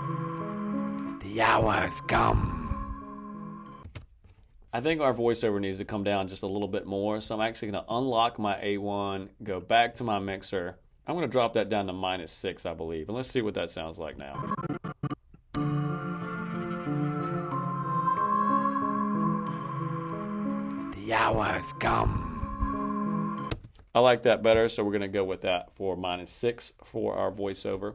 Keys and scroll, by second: 3.7 space, 15.4 space, 23.4 space.